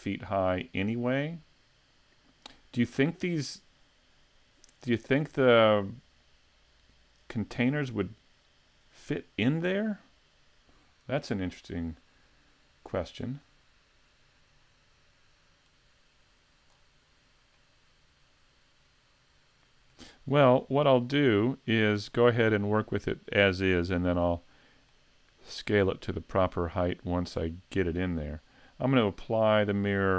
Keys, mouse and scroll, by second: 2.9-6.0 scroll down 1, 16.7-17.5 scroll down 1, 17.5 middle click, 17.5 scroll down 2, 21.2 middle click, 22.2 scroll up 4, 22.8 middle click, 24.0 shift+middle click, 24.9 middle click, 29.3 click, 29.9-30.1 scroll up 1.